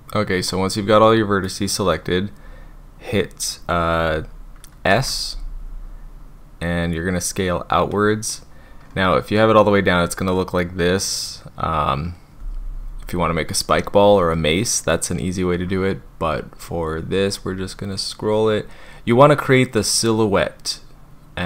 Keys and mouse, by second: 0.4 click, 5.0 s.